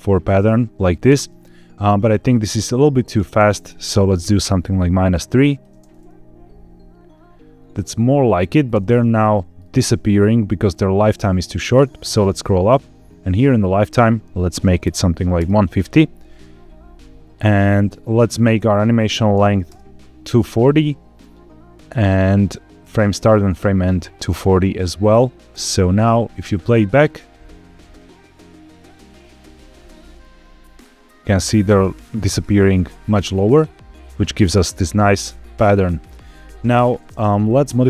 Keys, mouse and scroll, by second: 1.0 space, 3.0-4.3 drag, 5.3 click, 5.6 space, 9.2 shift+middle click, 11.5-12.2 scroll up 6, 13.7-15.3 drag, 18.4-19.6 drag, 24.9 click, 25.4 space, 29.8-30.2 scroll down 2, 31.2 scroll down 2, 33.2-33.6 scroll up 3, 34.6 shift+middle click, 36.9 space, 37.6-37.8 drag.